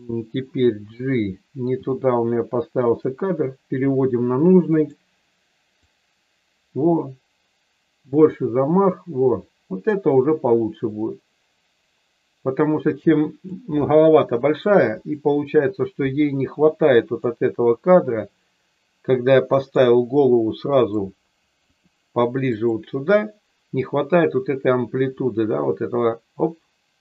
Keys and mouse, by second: 1.6 g, 2.9 click, 4.7 click, 5.9-13.5 drag, 17.3-19.8 drag, 20.8 click, 21.5 r, 22.5 click, 25.1-27.0 drag.